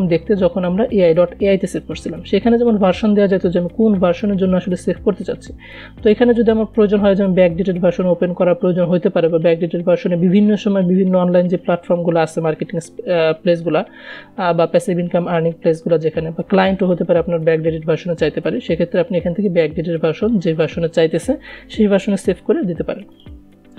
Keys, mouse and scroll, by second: 6.4 click, 23.5 click.